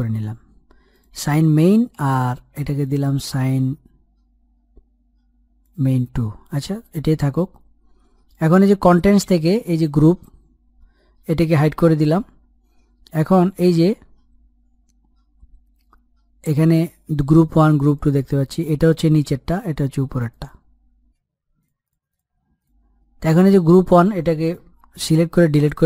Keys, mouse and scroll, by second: 0.6 click, 2.0 Return, 2.5-6.2 drag, 17.6 click, 20.9 click, 24.8 Delete.